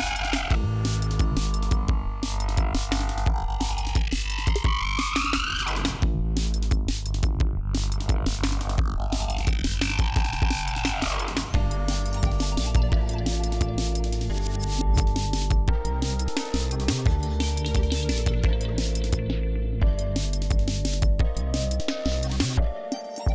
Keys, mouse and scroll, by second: 1.5 scroll up 2, 2.5-2.8 scroll down 2, 2.9-3.5 scroll up 2, 4.0 scroll up 2, 5.2 ctrl+scroll down 3, 7.7 ctrl+scroll up 2, 8.8-9.2 ctrl+scroll down 2, 10.6 scroll down 2, 12.8 scroll down 2, 13.2 scroll up 2, 13.7-14.6 ctrl+scroll down 4, 14.8-15.6 scroll down 4, 16.1-16.5 ctrl+scroll down 3, 16.5-17.1 ctrl+scroll up 5, 17.4 scroll down 2, 17.7 scroll up 2, 18.6 g, 18.9-19.4 scroll down 4, 20.3 d.